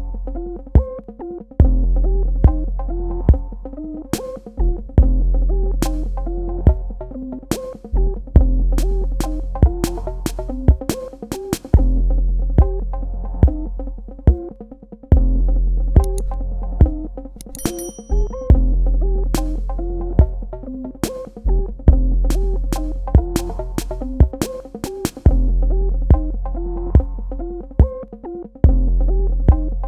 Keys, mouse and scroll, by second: 1.4 click, 7.4 KP_1, 7.8 Tab, 9.6 click, 11.8 space, 12.0 click, 13.1 space, 13.4 click, 18.8 click, 21.1 click.